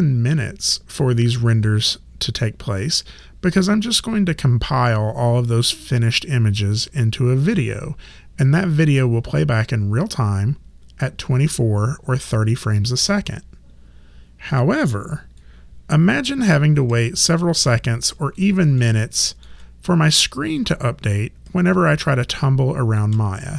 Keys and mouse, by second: 15.4 click, 17.5 alt+click, 18.8 alt+middle click, 22.1 alt+click.